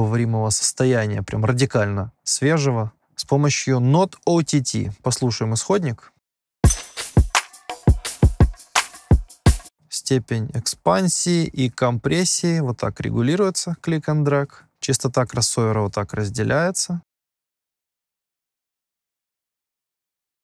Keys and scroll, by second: 6.6 space, 9.6 space, 9.7 -.